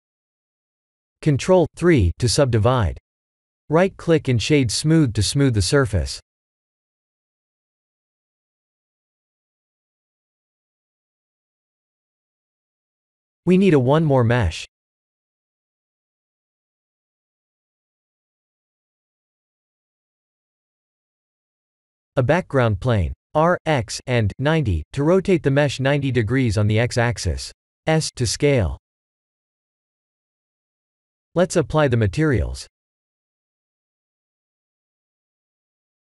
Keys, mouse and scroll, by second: 0.8 ctrl+3, 1.4 KP_Decimal, 2.3 scroll down 4, 3.0 right click, 3.8-4.5 scroll down 7, 5.9 click, 6.2 g, 9.5 click, 10.1 g, 11.2 scroll up 3, 12.2-12.6 scroll down 3, 13.4 click, 14.0 shift+middle click, 14.2 shift+middle click, 16.9 click, 17.3 shift+a, 19.6 r, 19.9 x, 20.1 9, 20.2 0, 20.5 Return, 21.6 r, 23.4 s, 25.2 s, 26.6 middle click, 26.7 middle click, 27.3 scroll down 4, 27.6 g, 29.3 middle click, 29.4 middle click, 30.6 s, 33.3 click, 34.4 click, 35.2 click, 35.9 click.